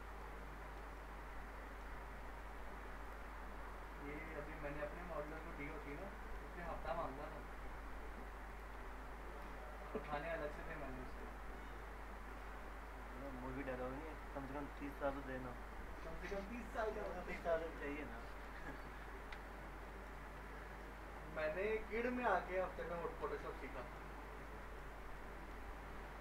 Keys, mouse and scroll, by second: 0.2-0.8 middle drag, 3.0 click, 5.1 click, 5.6 ctrl+shift+e, 6.0-6.6 middle click, 6.4 scroll down 1, 6.6 alt+middle click, 7.1 scroll up 1, 8.5 click, 9.3 ctrl+click, 9.6 ctrl+shift+e, 9.9 scroll down 1, 10.2-10.8 alt+middle click, 12.3 click, 16.5 click, 17.1 scroll down 1, 17.5 alt+middle click, 18.0 scroll up 1, 18.7 click, 19.1 scroll up 1, 19.8 scroll down 1, 19.8 alt+middle click, 20.2-20.5 scroll up 1, 20.8-21.4 alt+middle click, 21.5 scroll down 1, 22.5-23.3 middle click, 23.4 scroll up 1, 23.6 alt+middle click, 24.1 scroll up 1, 24.5-25.1 alt+middle click, 24.8 alt+scroll down 2, 25.2-25.8 middle click.